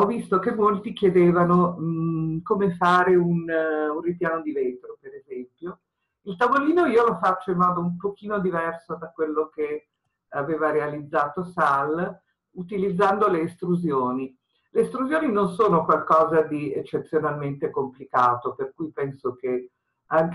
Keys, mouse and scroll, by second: 6.0-6.5 scroll up 1.